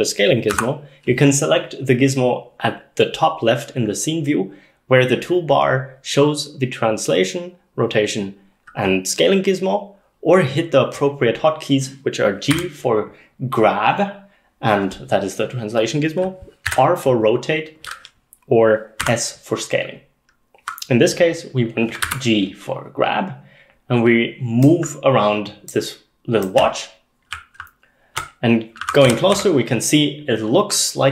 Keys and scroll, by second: 0.5 s, 12.6 g, 16.7 r, 19.0 s, 22.1 g, 26.6-29.9 typing.